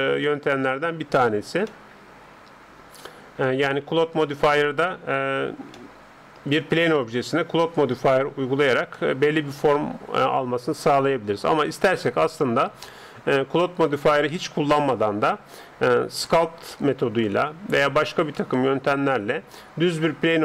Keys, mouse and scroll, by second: 1.7 middle click, 2.3 middle click, 2.5 middle click, 2.7 middle click, 2.9 middle click, 3.1 middle click, 5.7-10.6 middle drag, 12.1-13.8 scroll up 1, 13.8-14.4 scroll up 1, 14.7-18.3 scroll down 1, 18.3-20.2 middle drag.